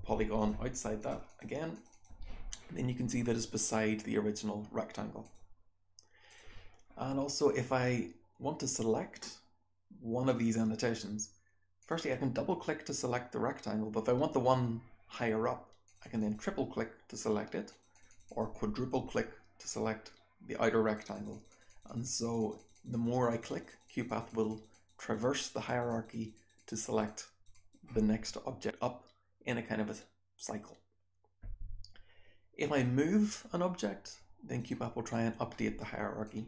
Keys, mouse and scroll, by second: 0.6 click, 0.9 click, 1.2 click, 1.6 click, 1.8 click, 5.1 click, 6.2 click, 11.7 click, 11.9 click, 15.8 click, 15.9 click, 16.1 click, 17.6 click, 17.9 click, 18.0 click, 18.2 click, 20.8 click, 21.0 click, 21.2 click, 21.4 click, 21.6 click, 21.8 click, 22.0 click, 22.1 click, 22.3 click, 22.5 click, 22.7 click, 22.8 click, 23.0 click, 23.2 click, 23.4 click, 23.6 click, 23.8 click, 24.0 click, 24.2 click, 24.4 click, 24.6 click, 24.9 click, 25.1 click, 25.3 click, 25.6 click, 25.8 click, 26.0 click, 26.3 click, 26.5 click, 26.7 click, 27.0 click, 27.4 click, 33.2-34.6 drag, 35.1-35.8 drag, 36.2-36.4 drag.